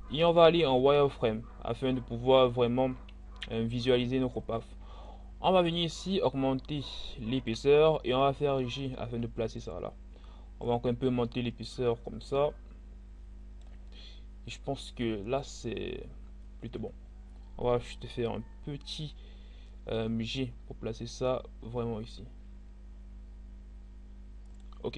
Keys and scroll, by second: 7.9 g, 19.8 g.